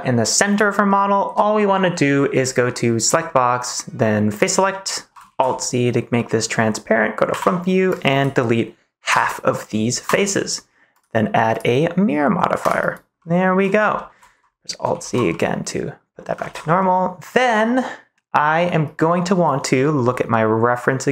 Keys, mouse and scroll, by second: 0.8-2.1 middle drag, 3.0 click, 4.3 click, 4.7 middle click, 5.2 alt+z, 6.1 middle click, 7.2 KP_1, 7.9 click, 9.0 Delete, 10.9-12.6 drag, 13.1 right click, 13.3 middle click, 13.9 shift+middle click, 14.8 alt+z, 15.2 middle click, 16.4 ctrl+s, 16.7 middle click.